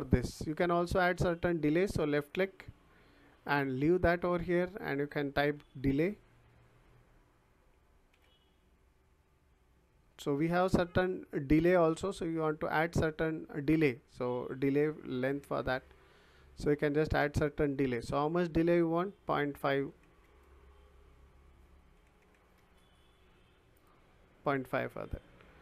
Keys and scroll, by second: 5.4 d, 5.7 e, 8.1 l, 19.5 ., 19.8 5, 20.2 Return, 21.7-22.7 typing.